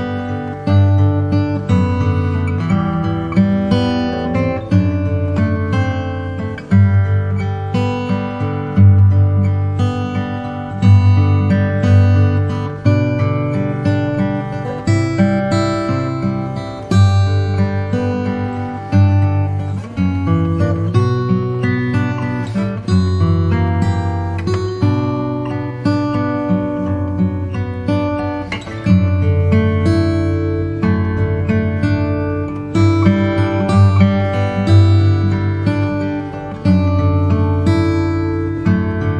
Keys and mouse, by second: 0.0 click, 0.9-2.5 right drag, 3.6 KP_0, 9.2 click, 10.4-16.2 right drag, 17.8 KP_7, 22.2 KP_0, 29.3-30.3 drag, 36.1-38.4 drag.